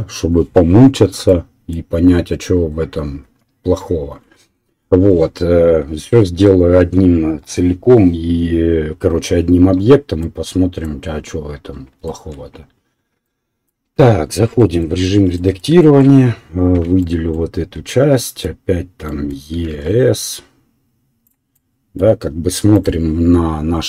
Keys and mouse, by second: 3.2 KP_1, 14.5 Tab, 16.7 3, 17.0 right click, 17.1-22.1 middle drag, 19.5 e.